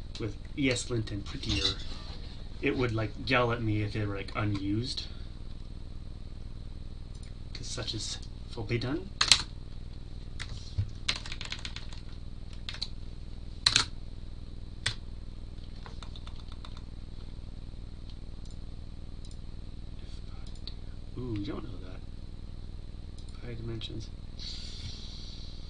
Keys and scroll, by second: 13.2 Tab, 14.8 Tab.